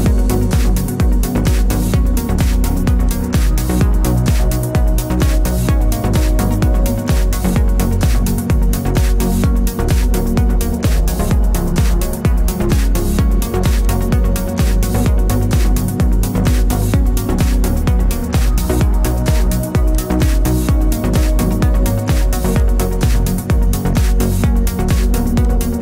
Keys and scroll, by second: 17.9 ctrl+t.